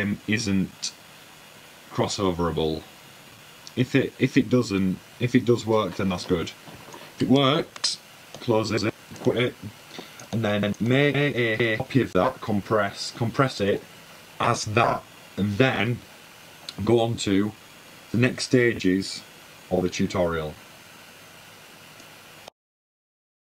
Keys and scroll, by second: 10.7 super+`, 12.3 super+w.